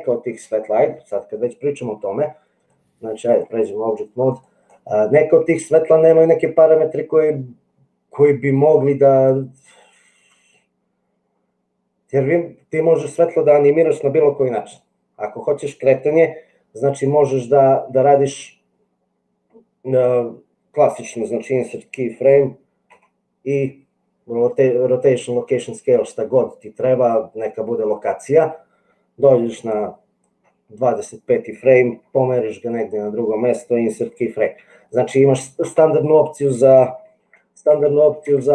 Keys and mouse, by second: 2.6 click, 4.2 click, 29.8 click, 32.1 g, 37.2 ctrl+z, 37.8 ctrl+z.